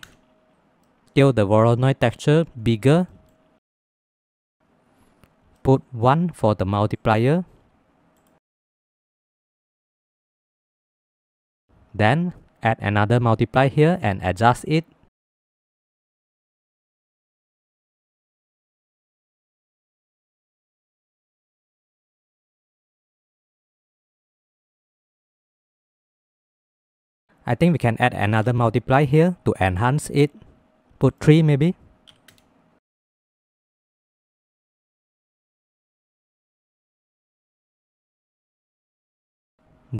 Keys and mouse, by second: 1.0 middle click, 1.4 middle click, 2.2-4.0 drag, 5.7 middle click, 7.0-8.2 drag, 9.0 middle click, 10.0 middle click, 10.2 middle click, 10.5 click, 11.8 click, 11.8 g, 12.1 shift+d, 13.0 click, 13.5-14.5 drag, 15.4 click, 16.8-18.0 drag, 20.5 middle click, 21.9 middle click, 22.4 middle click, 22.9 click, 23.5 click, 23.6 click, 24.8 click, 25.8 middle click, 26.7 click, 28.3 shift+d, 29.2 click, 31.1 click, 33.4 middle click, 34.0 click, 34.9 click, 36.0 click, 37.4 middle click, 37.9 middle click, 38.9 middle click, 39.5-39.9 middle drag.